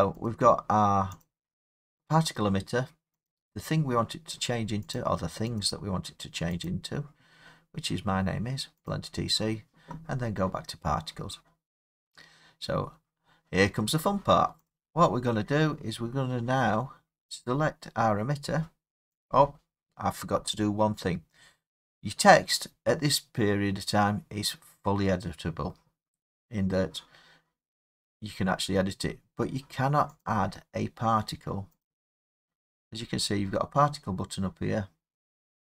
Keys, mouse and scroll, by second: 0.3 click, 1.3 click, 3.3 click, 4.9 click, 5.6 click, 6.6 click, 8.9 click, 11.3 scroll, 14.7 click, 17.4 click, 19.3 click, 30.2 click, 31.8 click.